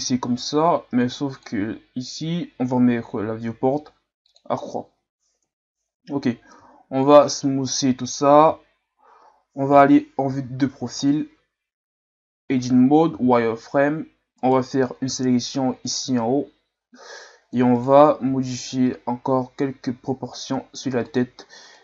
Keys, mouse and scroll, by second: 5.4 KP_1, 6.6 w, 7.9-8.6 scroll up 2, 8.6-9.0 shift+scroll up 2, 9.7 KP_3, 10.9-12.4 ctrl+scroll up 2, 12.4 Tab, 13.2 z, 14.4 right click, 14.9 c, 18.3 g, 21.7 right click.